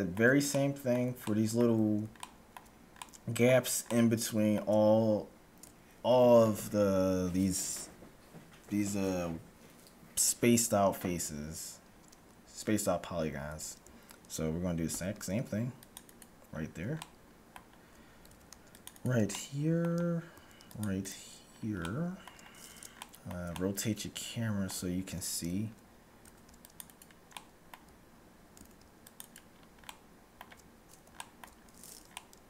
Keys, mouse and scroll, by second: 13.3 a, 15.0 ctrl+r, 16.3-17.0 scroll up 1, 17.0-18.8 middle drag, 18.2 ctrl+r, 19.2-21.3 middle drag, 20.2 ctrl+r, 21.7 scroll down 1, 21.8-25.3 middle drag, 26.2 ctrl+r, 27.3-29.0 middle drag, 28.7 ctrl+r, 29.3-30.0 scroll up 1, 30.0-32.4 middle drag.